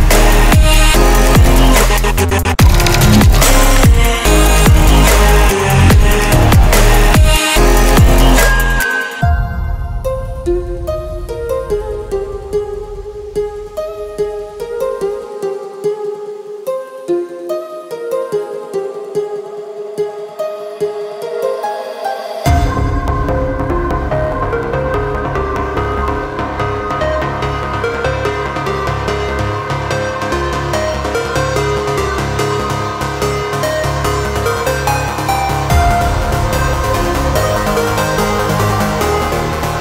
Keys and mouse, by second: 0.0-7.8 typing, 11.9-14.7 typing, 15.2 Return, 16.2-30.0 typing, 30.4 Return, 32.2 Return, 32.5 shift+s, 35.0-37.5 typing, 37.9 Return.